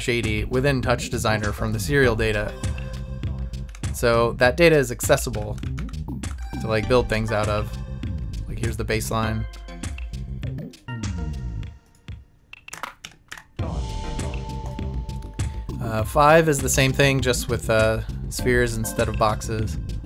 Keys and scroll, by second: 3.7 Down, 5.4 Up, 5.8 Left, 6.3 Left.